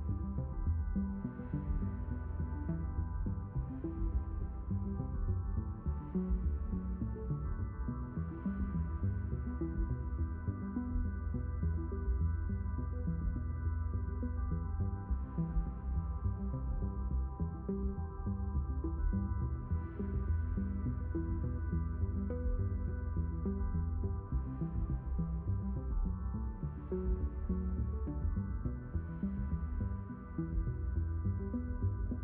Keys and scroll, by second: 2.3 shift+n, 5.1 s, 14.0 q, 16.2 shift+n, 18.0 s, 23.8 a, 25.5 shift+n, 27.6 s, 30.5 q.